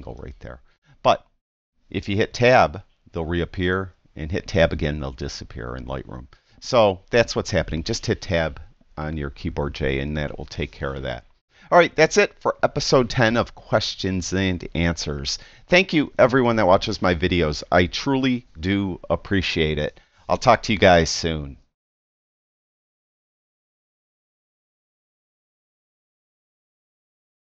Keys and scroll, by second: 2.5 Tab, 3.8 Tab, 5.0 Tab.